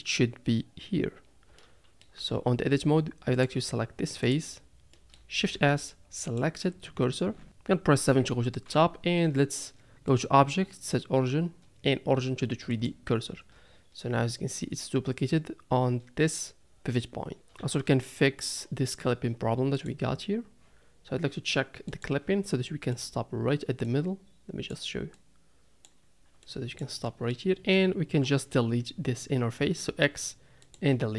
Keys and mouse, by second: 1.6-2.0 middle drag, 2.4 Tab, 3.4 click, 4.3 click, 4.9 middle click, 5.5 shift+s, 7.4 Tab, 8.1 KP_7, 10.1-12.7 right drag, 12.7 click, 17.7 Tab, 17.8 middle click, 19.7 click, 21.9 click, 22.9 click, 23.9 click, 25.1 click, 26.4 click, 27.0 middle click, 28.2 middle click, 29.8 x.